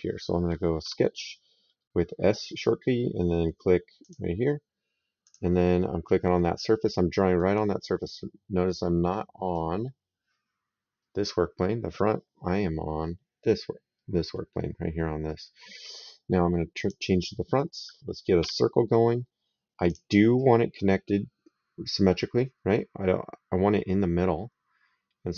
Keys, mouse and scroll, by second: 0.6 s, 3.9 click, 5.0 click, 6.5 right click, 7.8 right click, 15.1 right click, 16.6 click, 18.3 s, 19.7 click.